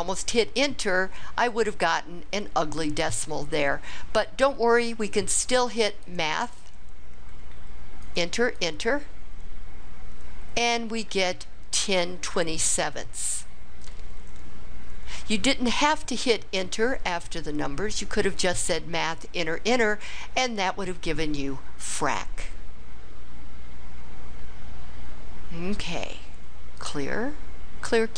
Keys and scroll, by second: 1.5 Return, 8.0 Return, 8.6 Return.